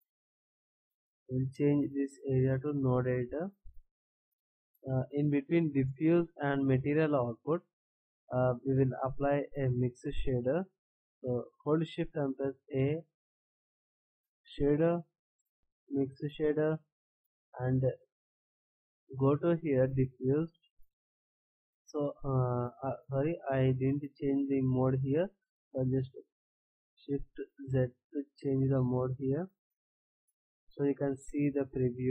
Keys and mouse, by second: 0.2 t, 4.2 n, 7.6 click, 8.3 click, 12.2 shift+a, 27.7 shift+z.